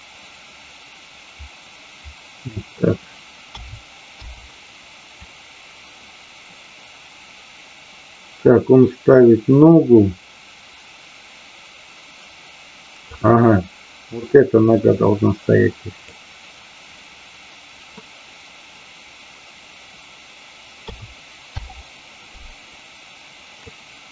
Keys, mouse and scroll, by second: 5.2-13.2 drag, 14.2-16.2 drag, 22.6-23.7 drag.